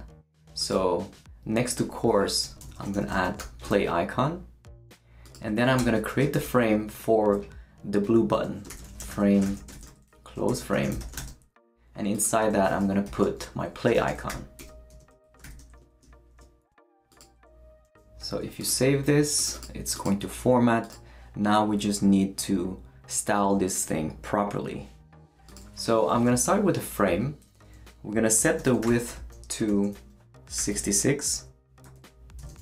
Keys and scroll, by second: 2.2-3.9 typing, 5.8 Return, 6.3 shift+,, 8.6-11.7 typing, 13.0-15.4 typing, 17.8 super+s, 26.1 Left, 26.3 space, 28.2-30.6 typing, 31.8 Right, 32.4-32.6 typing.